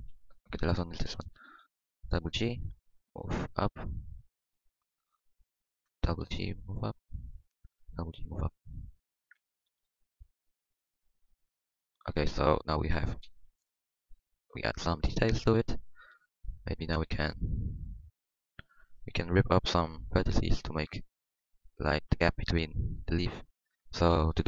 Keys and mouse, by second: 0.1 KP_1, 0.5 KP_1, 1.1 KP_5, 2.8 g, 5.6-7.5 middle drag, 6.1 g, 7.8 g, 10.6 g, 12.1 g, 13.2 KP_1, 18.4 middle click, 19.3 KP_1.